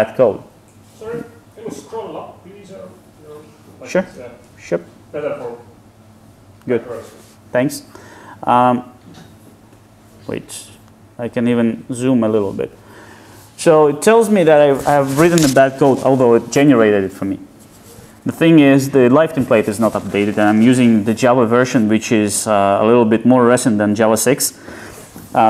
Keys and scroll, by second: 9.8 super+F8.